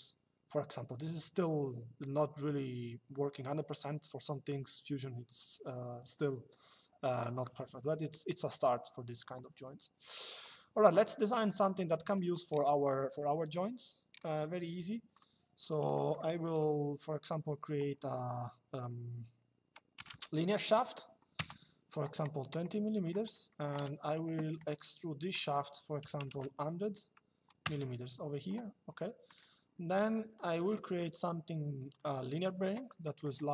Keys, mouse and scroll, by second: 10.1 click, 11.8 click, 13.9 click, 16.3 c, 17.0 click, 19.6 KP_2, 21.1 Return, 22.7 click, 23.0 middle click, 23.2-24.0 typing, 24.4 middle click, 25.7 KP_1, 25.9 KP_0, 27.3 KP_Enter, 28.7 middle click, 30.1 click, 32.7 middle click.